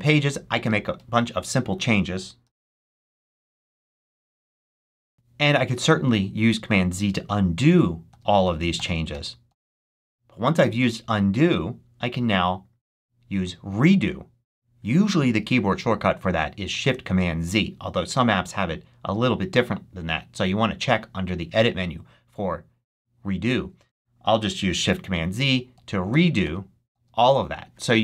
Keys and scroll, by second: 0.0-5.2 typing, 7.6 super+z, 25.3 shift+super+z.